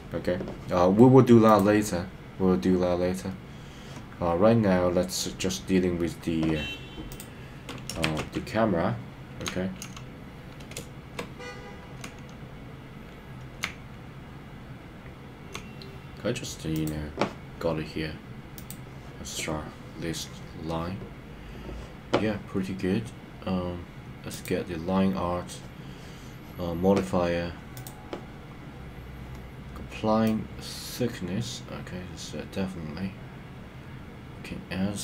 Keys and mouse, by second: 8.0 shift+`, 9.5-11.3 typing, 13.8-15.4 a, 15.5 a, 16.7 click, 30.4-35.0 drag.